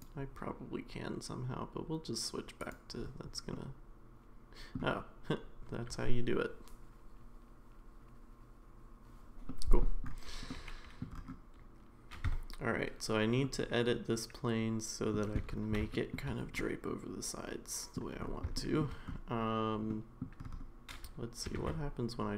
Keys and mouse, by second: 2.6-3.5 drag, 3.5-4.8 middle drag, 9.6 middle drag, 10.5-11.0 middle drag, 12.3 Tab, 13.4-15.1 middle drag, 15.9 shift+middle click, 16.6-18.0 middle drag, 18.5 shift+middle click, 19.9 middle click, 21.6 ctrl+r.